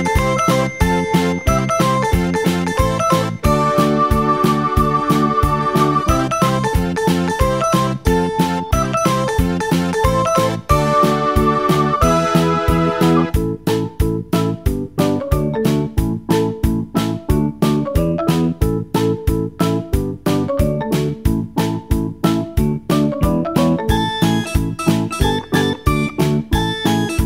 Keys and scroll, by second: 1.4 Delete.